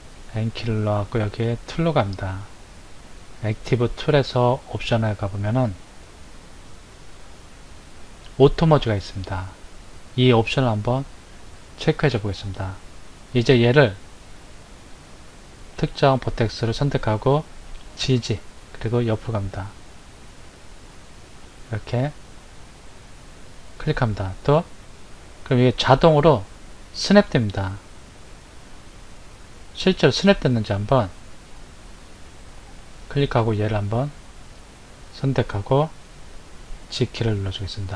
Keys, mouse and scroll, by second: 0.3 n, 1.7 click, 4.8 click, 11.1 click, 14.6 click, 15.7 click, 17.9 g, 32.7 click, 34.5 click, 37.5 g.